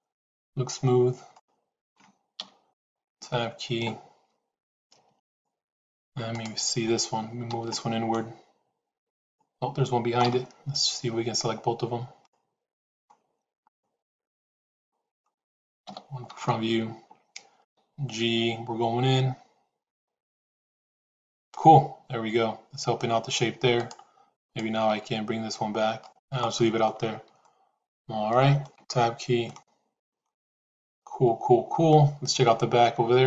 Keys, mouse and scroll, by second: 1.2 middle click, 2.2 KP_1, 3.4 Tab, 5.1 shift+click, 6.2 click, 7.4 g, 11.8 shift+z, 12.1 middle click, 15.8 KP_1, 16.4 shift+z, 17.5 g, 24.2 click, 24.8 g, 27.2-28.5 middle drag, 28.8 Tab, 29.4-31.8 middle drag.